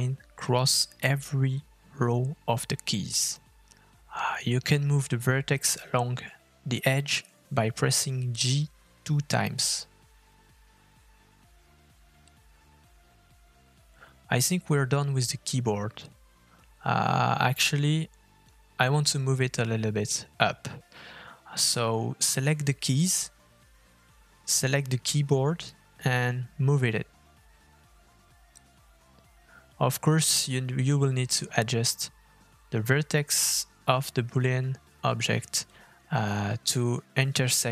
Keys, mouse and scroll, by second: 1.2 k, 5.3 click, 6.3 g, 10.6 k, 13.2 click, 13.9 g, 15.4 Tab, 16.8 middle click, 17.1-17.5 scroll up 3, 17.5 shift+middle click, 19.0 middle click, 20.1 click, 20.7 f, 21.5 middle click, 22.0-22.8 scroll down 3, 22.2 middle click, 22.9 shift+middle click, 23.6-23.9 scroll up 2, 24.2 middle click, 25.0 click, 26.0 middle click, 26.4-27.2 scroll up 3, 27.6 shift+click, 28.0 scroll down 1, 28.9 g, 36.2 shift+middle click, 36.7 middle click, 37.1-37.7 scroll down 1.